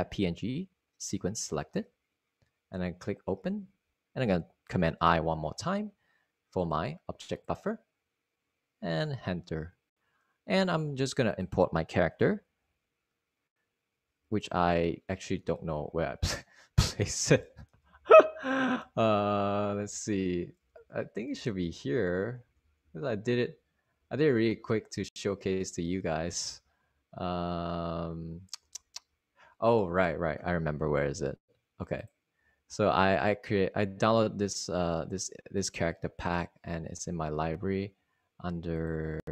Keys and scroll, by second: 6.8 Return, 8.0 super+i, 12.3 Return, 15.4 super+i, 17.3 super+Up, 18.4 Left, 18.9 Up, 19.4 Up, 19.4 Right, 19.9 Down, 20.4 Up, 21.7 Left, 22.1 Down, 22.8 Down, 23.6 Right, 23.8 Down, 24.5 Up, 25.2 Down, 25.5-25.8 typing, 26.7 Up, 27.2 Up, 27.6 typing, 28.7-29.4 typing, 29.5 Down, 30.7 Down, 31.5 Up, 31.8 Up, 31.9 Up.